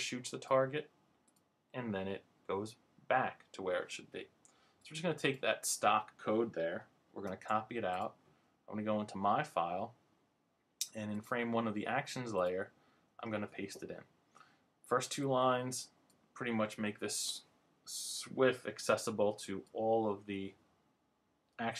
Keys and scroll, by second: 7.2 super+c, 13.3 super+v.